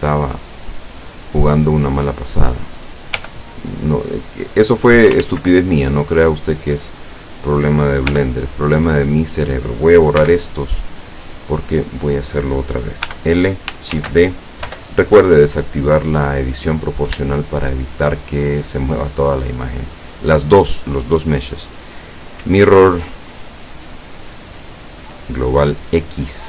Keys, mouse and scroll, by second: 2.2 right click, 3.3 l, 4.6 click, 5.3 ctrl+z, 7.4 right click, 8.2 l, 10.3 x, 10.9 click, 12.0 right click, 13.1 l, 14.0 shift+d, 14.7 Return, 15.8 scroll up 2, 15.8-16.9 middle drag, 17.3-19.1 shift+middle drag, 20.6 click, 26.1 click.